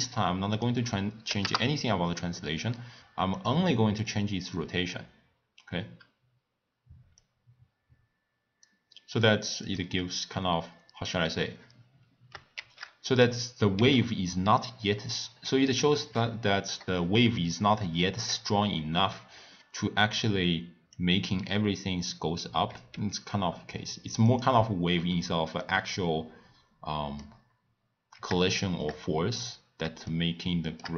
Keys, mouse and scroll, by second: 0.5-3.7 drag, 4.1-7.1 drag, 7.2-9.7 drag, 12.6 shift+d, 13.7 s, 20.9 click, 22.9 s, 25.5 scroll down 3, 25.6-27.4 middle drag, 27.4-28.5 scroll up 4, 28.5-29.4 shift+middle drag, 29.4-30.1 scroll down 1, 30.1-30.9 shift+middle drag.